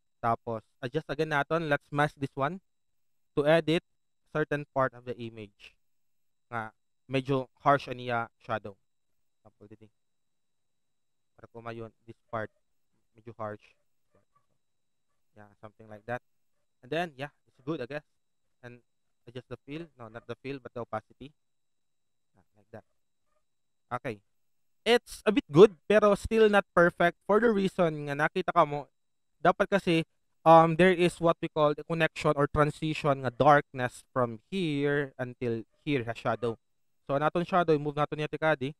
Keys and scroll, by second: 3.6 alt+space, 17.6 alt+v, 23.3 typing, 27.6 alt+space, 36.0 alt+space.